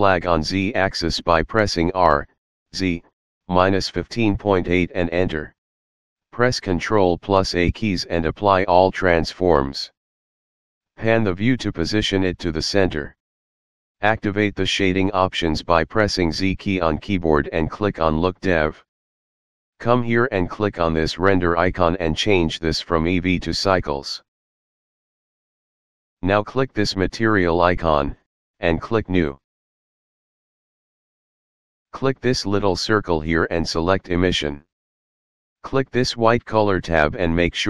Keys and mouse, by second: 1.3 r, 2.7 KP_Subtract, 3.2 KP_Subtract, 4.2 KP_1, 4.4 KP_5, 4.8 KP_Decimal, 5.2 KP_8, 7.7 ctrl+a, 9.7 click, 11.6 shift+middle click, 17.2 z, 18.7 click, 20.8 click, 23.3 click, 24.5 click, 27.1 click, 30.2 click, 32.6 click, 34.3 click, 36.7 click.